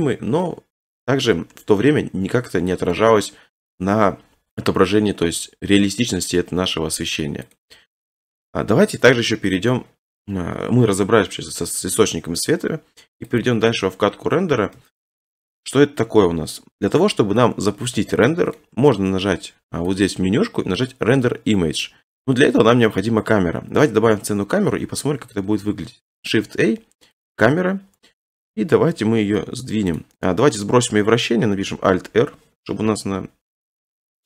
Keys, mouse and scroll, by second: 2.9-3.8 scroll, 7.5 click, 7.9 scroll, 9.7 scroll, 11.5 scroll, 13.4 click, 14.3 scroll, 14.8 shift+middle click, 15.3 shift+middle click, 15.5 middle click, 15.6 middle click, 17.4 scroll, 18.6 middle click, 20.0 click, 22.6-23.2 scroll, 23.8 scroll, 24.7 a, 27.2 click, 28.5 7, 29.2 g, 30.0 click, 30.2 middle click, 31.3 middle click, 31.7 alt+r, 32.7 7, 33.9 1.